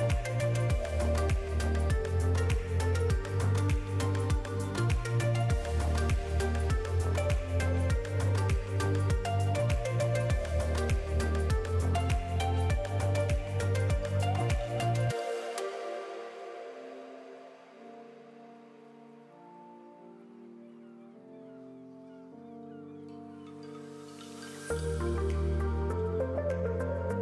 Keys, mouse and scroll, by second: 4.0 middle click, 10.7 click, 11.1 middle click, 14.7 click, 19.1 click, 21.1 click, 25.5 click.